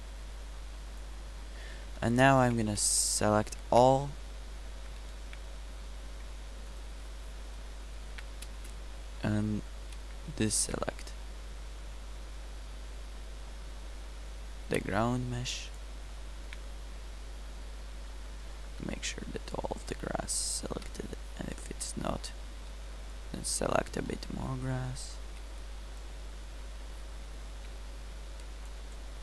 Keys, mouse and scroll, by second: 2.6 a, 3.9 a, 15.1 b, 18.9 g, 22.7 b, 25.5 b, 27.6 z, 28.4 b.